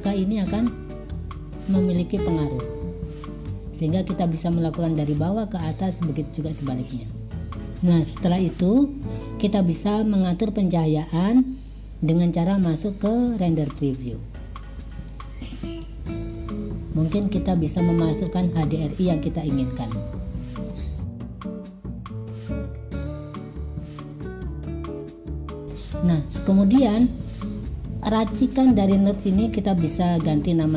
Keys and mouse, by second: 2.7-3.9 drag, 13.9 click, 15.2 click, 17.1-18.4 drag, 21.1 click, 21.5-22.3 drag, 22.4 click, 24.7 middle click, 24.8 click, 25.2 click, 25.5 click.